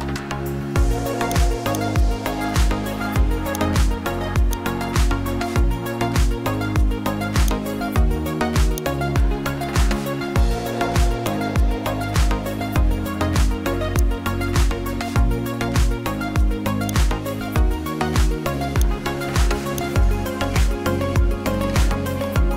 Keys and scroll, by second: 5.6 ctrl+t.